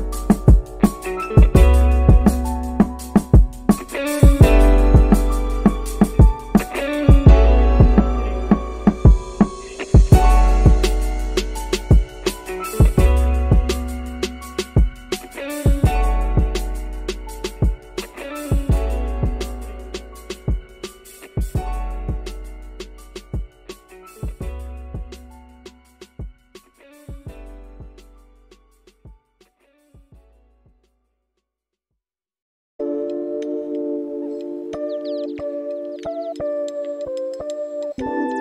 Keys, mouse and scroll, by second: 4.5 g, 13.5 click, 14.0 click, 17.7 click, 26.0 middle click, 27.9-38.0 drag.